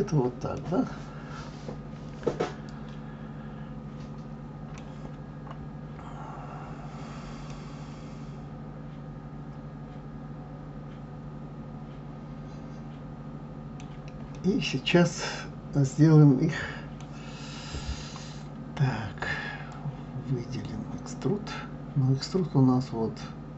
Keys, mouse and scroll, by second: 0.6-3.6 middle drag, 7.5-10.5 middle drag, 14.4-17.4 middle drag, 19.7-22.7 drag.